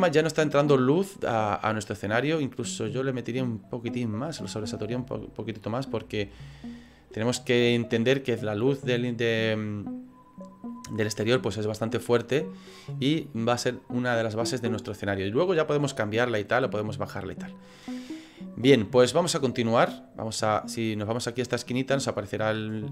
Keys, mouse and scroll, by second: 2.0 click, 22.5 click.